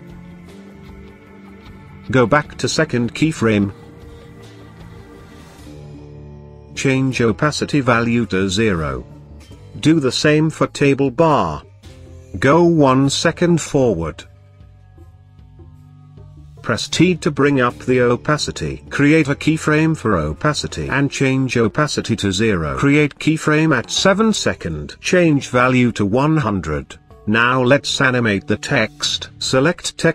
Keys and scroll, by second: 16.6 t.